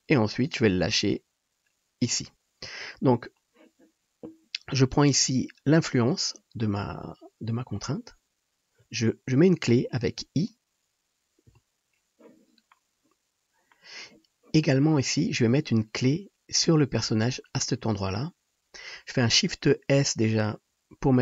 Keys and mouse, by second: 11.5 i.